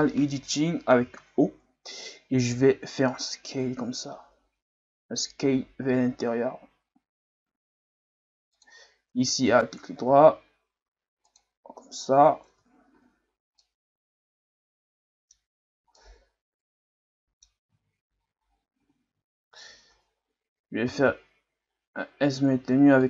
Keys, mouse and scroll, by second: 1.0 o, 2.5 s, 9.5 alt+right click, 10.1 s, 12.5 Tab, 12.9 a, 13.1-13.6 scroll down 2, 13.6-17.6 middle drag, 17.6-18.8 scroll up 3, 18.8 Tab, 20.8 s.